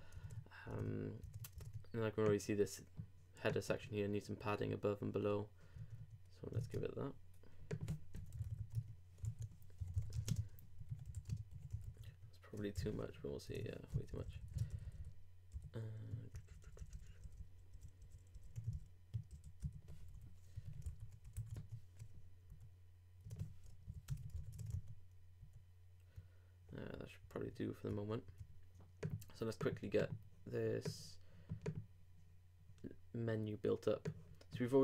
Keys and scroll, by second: 0.2 super+Tab, 6.5 shift+super+Tab, 9.2 super+Tab, 9.8 super+i, 9.9-10.7 typing, 11.8 super+;, 12.1 super+Tab, 12.8 super+r, 13.5 super+Tab, 13.9 super+Left, 14.6 ctrl+Left, 14.7 ctrl+Down, 16.3 ctrl+alt+Down, 18.7 alt+shift+Down, 19.3 shift+Up, 20.8 super+-, 21.2 super+BackSpace, 21.4 super+s, 21.5 super+Tab, 22.5 super+r, 23.2 super+Tab, 23.9 super+Left, 24.3 super+2, 24.5 super+Tab, 24.7 super+r, 27.3 super+Tab.